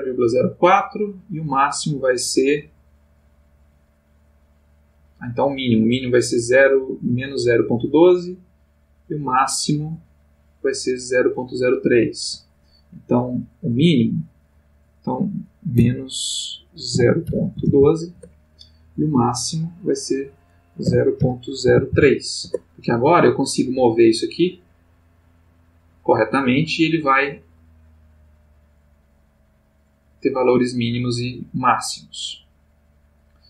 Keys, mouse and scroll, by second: 11.9 Escape, 13.7 click, 14.2 click, 15.7 -, 16.9 0, 17.2 ., 17.5 1, 17.6 2, 18.1 Return, 19.5 click, 20.8 0, 21.1 ., 21.6 0, 21.9 3, 22.4 Return, 23.6 g.